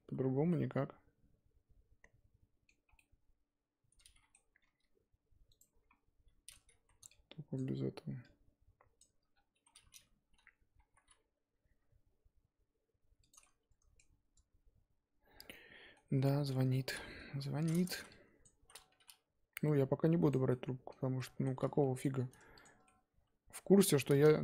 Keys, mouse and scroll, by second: 0.1 z, 0.5-4.6 middle drag, 4.6 g, 5.9-6.5 scroll down 1, 6.5-6.8 scroll up 2, 6.8 z, 7.5 ctrl+click, 9.0 ctrl+click, 9.3 scroll down 1, 9.6 z, 10.9 g, 13.4-15.5 middle drag, 15.5-16.1 scroll up 1, 16.5 middle click, 17.2 KP_1, 18.0 z, 18.1 click, 18.6 z, 18.9 s, 20.5-22.1 middle drag, 22.1 2, 22.6 alt+Left, 22.8-24.4 middle drag.